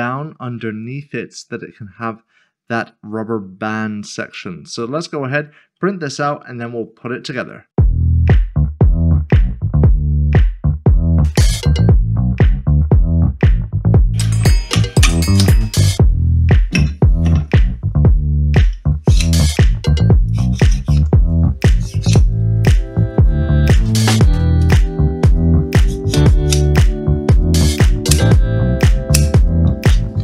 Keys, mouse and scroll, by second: 6.2 click.